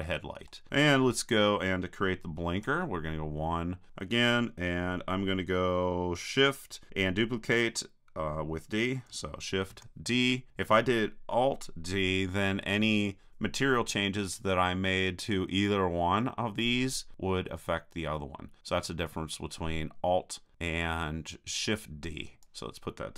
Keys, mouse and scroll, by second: 2.6 KP_1, 3.6-5.5 drag, 9.7 shift+d, 22.4-23.1 drag.